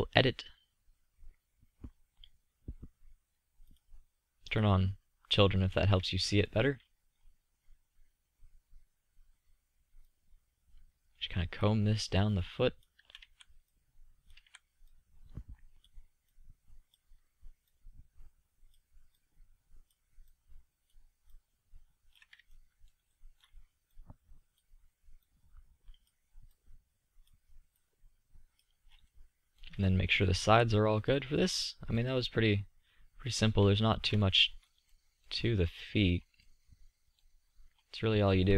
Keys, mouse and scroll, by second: 13.0 z, 14.2 z, 22.4-23.4 middle drag, 30.2 z, 32.2 click, 35.5-37.1 middle drag, 37.7 middle click.